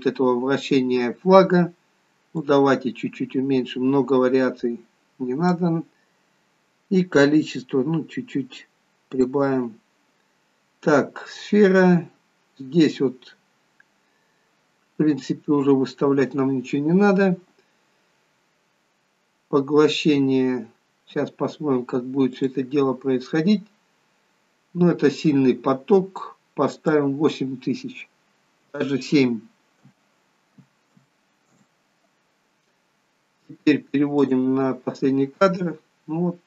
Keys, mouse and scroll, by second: 2.4 click, 7.0 click, 10.1-11.3 scroll down 3, 14.2 scroll down 6, 15.5-16.2 scroll down 1, 22.4 click, 26.8 click, 34.2 click.